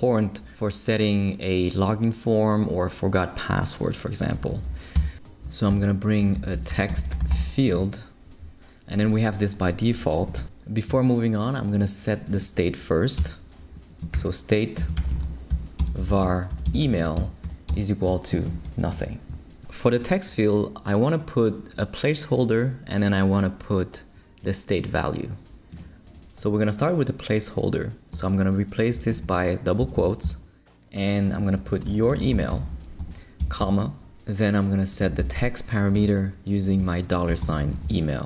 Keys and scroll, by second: 4.9 Return, 5.7 shift+super+l, 6.1-7.9 typing, 13.2 Return, 14.0 shift+Return, 14.1-18.3 typing, 19.3 shift+super+', 28.1 BackSpace, 28.9 shift+BackSpace, 29.1 shift+', 29.8 shift+Left, 30.2 Right, 31.3 shift+Right, 31.3-33.4 typing, 34.7-38.1 typing, 35.9 Return.